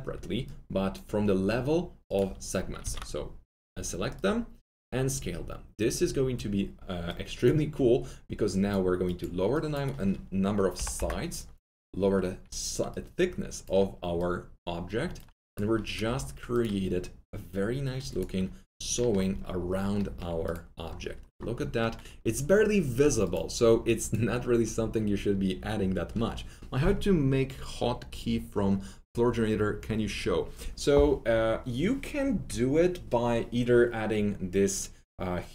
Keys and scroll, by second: 2.8 ctrl+a, 10.7 KP_6, 10.9 Return, 16.0 alt+F3.